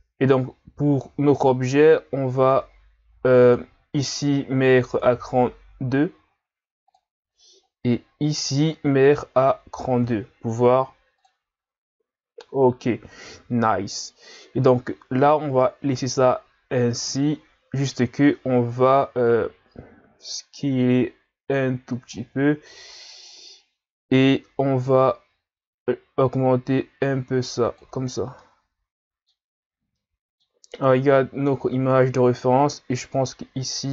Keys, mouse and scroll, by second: 1.4-6.4 drag, 8.4 click, 19.3 click, 24.8 click, 28.1-28.4 scroll down 4, 28.4-31.5 middle drag, 31.5-32.9 scroll up 2, 32.9 click.